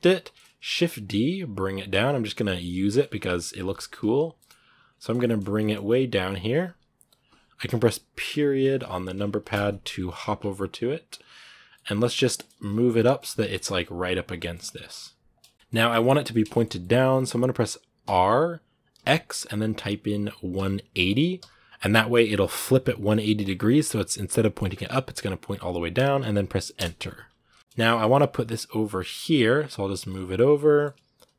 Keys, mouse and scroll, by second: 0.5 shift+d, 2.0-5.3 shift+middle drag, 5.3 g, 8.0 KP_Decimal, 11.5 middle click, 12.3 g, 12.8 middle click, 13.5 g, 14.2 shift+middle click, 14.3 scroll up 2, 14.5 middle click, 14.8 g, 15.3 shift+middle click, 15.5 g, 16.1 shift+middle click, 16.8 scroll down 1, 16.9 middle click, 17.8 r, 27.3 KP_Decimal, 27.6 g, 27.6 shift+middle click, 27.9 g, 29.9-30.9 middle drag, 30.9 g.